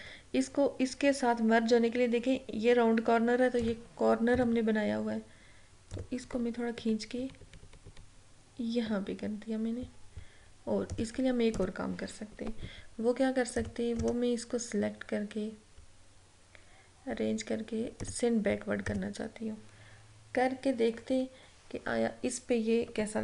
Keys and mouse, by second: 3.7 click, 4.4 a, 6.0 click, 6.9 Left, 11.0 click, 14.1 right click, 18.1 click.